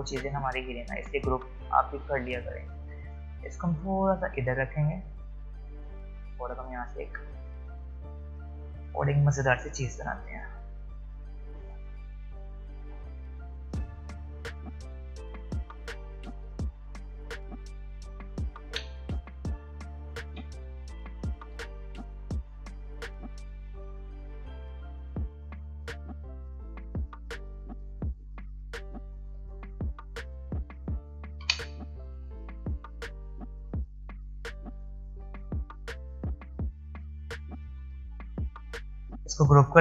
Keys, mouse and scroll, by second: 0.5 alt+scroll down 1, 0.7 alt+scroll up 1, 3.2-8.3 drag, 9.6 click, 11.6-16.3 drag, 16.3 v, 18.6 ctrl+z, 21.4 p, 23.2 click, 25.7-30.2 drag, 32.6 click, 37.8 click, 39.2 ctrl+g.